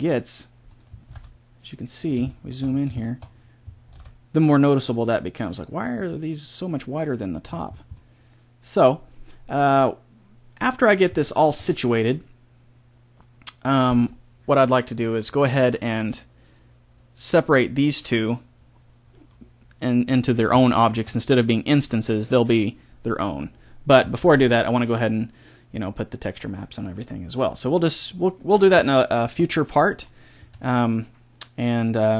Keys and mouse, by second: 0.9 s, 2.2-4.7 middle drag, 3.6 s, 4.7 click, 7.4-9.7 middle drag, 11.2-18.1 middle drag, 19.3-28.9 middle drag, 30.3 a, 30.8-32.1 middle drag.